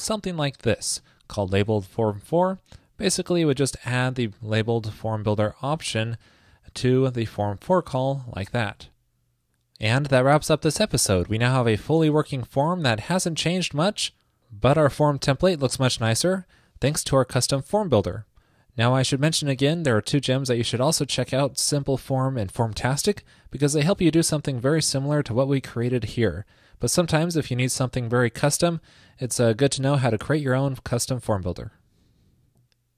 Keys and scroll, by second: 1.0 super+v, 8.8 super+s, 13.0 super+r.